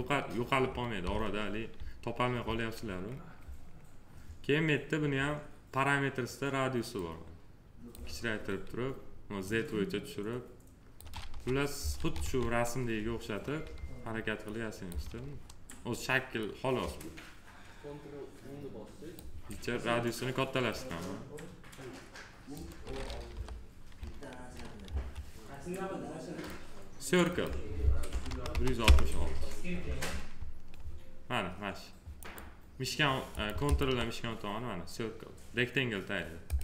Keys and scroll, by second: 11.2 f, 23.1 p, 24.7 F4, 27.9 1, 28.7 Return.